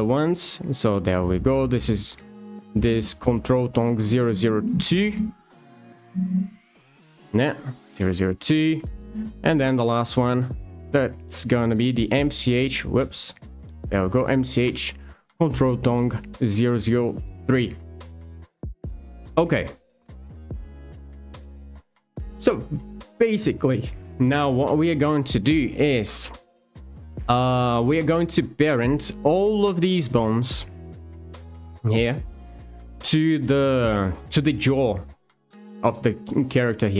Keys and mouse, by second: 6.1 F2, 9.8 alt+click, 11.9 ctrl+v, 13.0 F2, 24.9 shift+middle click, 27.9 shift+middle click.